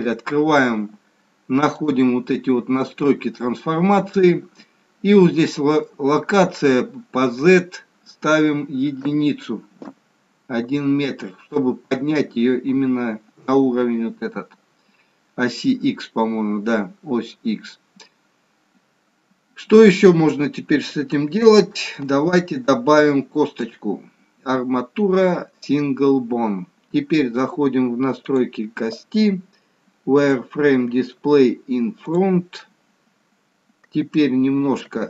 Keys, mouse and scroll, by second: 1.7 click, 7.4 click, 19.6-20.5 scroll up 3, 21.2 scroll up 2, 21.3 shift+middle click, 22.9 click, 28.1 click, 30.2 click, 32.1 click, 34.7 s.